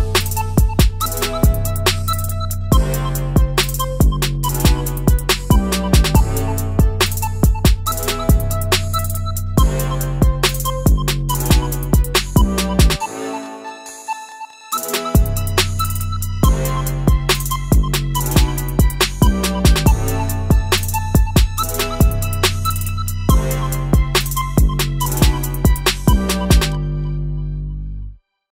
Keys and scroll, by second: 0.2 BackSpace, 0.3 BackSpace, 0.5 BackSpace, 15.9 Down, 22.1-25.0 Down, 26.7 Up, 26.8 Up, 26.9-27.4 Down.